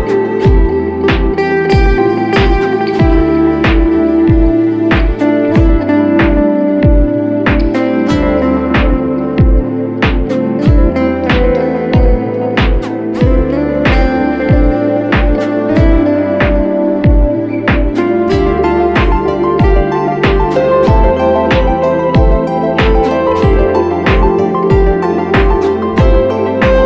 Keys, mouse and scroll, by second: 8.5 double click, 12.4-13.5 typing.